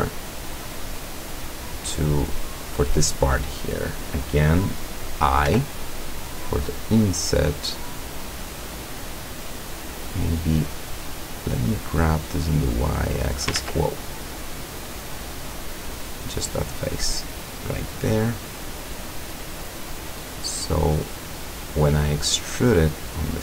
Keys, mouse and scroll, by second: 1.0-2.2 middle drag, 5.5 i, 9.8 click, 12.5-13.7 drag, 13.6 ctrl+z, 14.2 click, 15.2 middle click, 15.9 right click, 17.0-21.8 drag, 21.9 middle click, 22.5 middle click.